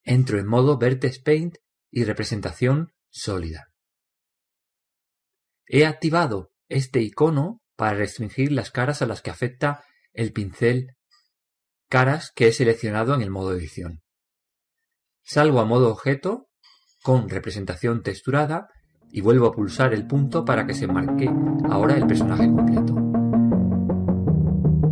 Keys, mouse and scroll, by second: 0.5-1.2 drag, 2.9-4.7 drag, 4.7-13.0 middle drag, 17.7-21.0 drag, 21.6 KP_Decimal.